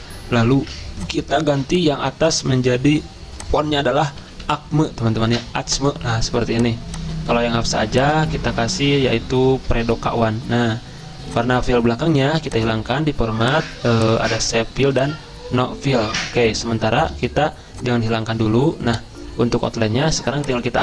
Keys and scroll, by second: 4.2 typing, 5.4 Return, 8.6-9.3 typing, 9.6 Return.